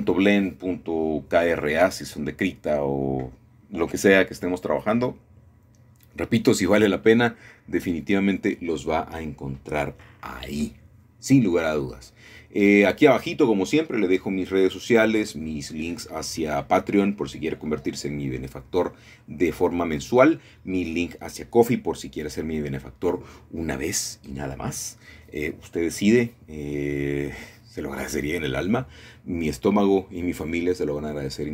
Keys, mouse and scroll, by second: 0.1 middle click, 0.4 Tab, 2.7 g, 2.9 y, 6.0 shift+click, 7.2-8.3 scroll down 1, 8.7 middle click, 9.0-10.9 scroll down 1, 10.9-13.4 shift+middle drag, 13.5 shift+middle click, 13.9-15.7 scroll up 1, 15.4 shift+middle click, 15.7-16.8 scroll down 1, 17.3 middle click, 18.0 shift+middle click, 18.7 shift+middle click, 19.0-19.3 scroll up 1, 19.3 scroll down 1, 19.5-21.0 scroll up 4, 20.3 typing, 21.8 Tab, 22.4 shift+middle click, 23.5 1, 24.0 scroll up 3, 26.9 shift+middle click, 28.0 middle click, 28.7-30.0 middle drag, 29.1 typing, 30.8-31.5 alt+shift+drag.